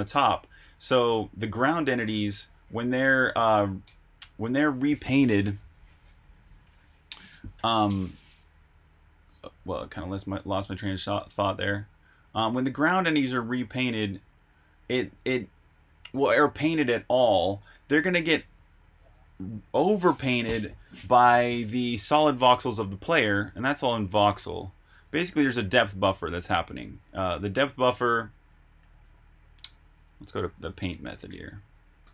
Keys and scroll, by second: 0.5-2.5 typing, 1.6 Escape, 5.7-6.9 typing, 8.2-11.7 typing, 12.9 typing, 14.3 k, 16.3 j, 22.9-28.3 typing.